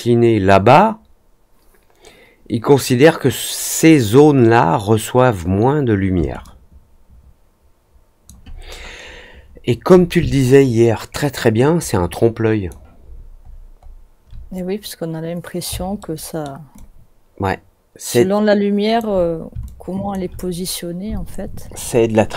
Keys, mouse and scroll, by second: 6.4-8.2 alt+drag, 8.6-9.7 alt+scroll up 3, 10.5-12.6 alt+drag, 13.1-13.6 alt+scroll up 2, 15.9-16.4 alt+middle drag, 16.7-18.9 alt+drag, 19.6-20.0 alt+drag.